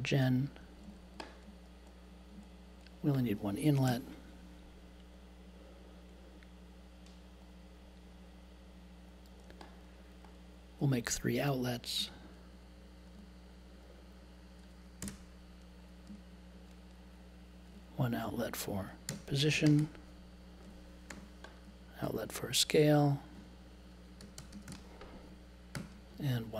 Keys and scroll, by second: 3.8 BackSpace, 15.0 BackSpace, 16.1 2, 18.8-20.2 typing, 21.1 super+j, 23.9-25.1 typing, 25.7 super+j.